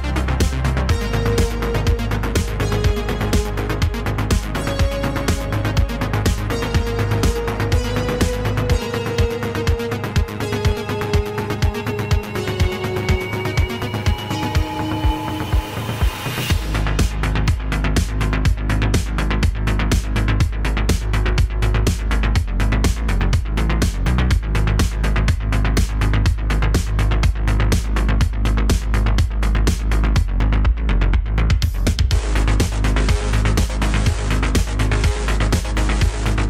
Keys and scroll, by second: 0.1 g, 1.8 g, 3.6 g, 4.6 g, 5.5 g, 7.8 Tab, 8.6 Tab, 9.3 g, 10.3 g, 10.5 z, 12.3 g, 12.9 Tab, 14.3 Tab, 14.7 g, 18.8 e, 21.5 g, 25.8 g, 26.1 z, 27.8 e, 29.3 e, 31.2 g, 31.4 z, 33.4 g, 33.9 Tab, 35.4 Tab.